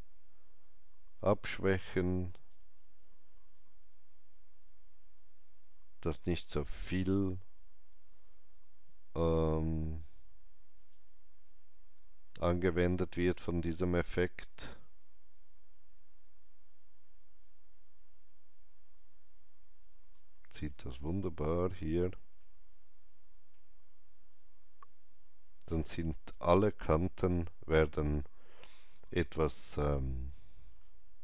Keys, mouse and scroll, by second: 10.7-13.5 drag, 12.4 alt+right click, 13.5-29.6 alt+drag, 22.3 alt+middle click, 29.5 scroll up 1, 30.6 scroll up 1.